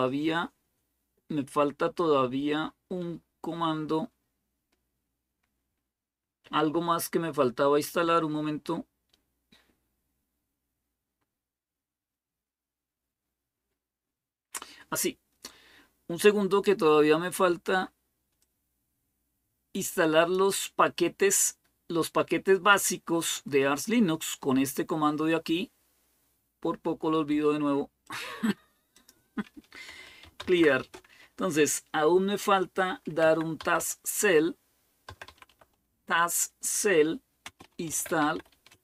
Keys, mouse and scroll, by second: 0.1-0.9 scroll down 1, 0.9-8.2 scroll down 1, 8.2-10.2 scroll down 1, 10.2-12.0 scroll down 1, 12.0-12.8 scroll down 1, 12.8-13.3 scroll down 1, 13.3-14.1 scroll down 1, 18.2-29.3 drag, 29.5-35.8 typing, 37.0-38.8 typing.